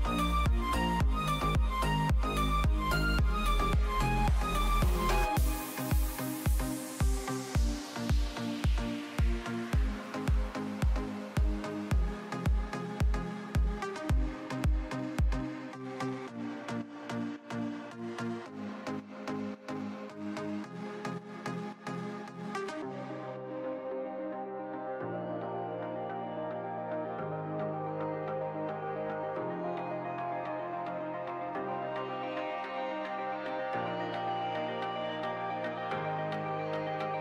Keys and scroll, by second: 0.3 ctrl+z, 7.0 ctrl+shift+[, 7.2 ctrl+], 9.3 space.